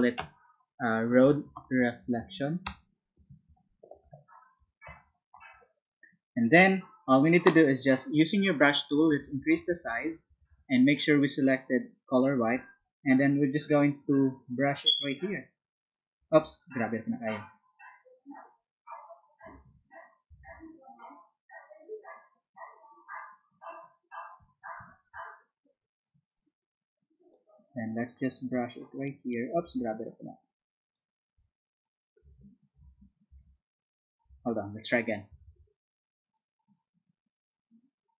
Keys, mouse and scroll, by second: 0.9-5.6 typing, 13.9-15.9 drag, 16.4 ctrl+z, 17.2-18.7 drag, 19.9 ctrl+z, 21.0 click, 23.8 click, 26.0 click, 27.3-28.9 drag, 29.7 ctrl+z, 30.2 click, 32.3 ctrl+z, 32.8 ctrl+z, 35.3 z, 36.2 click.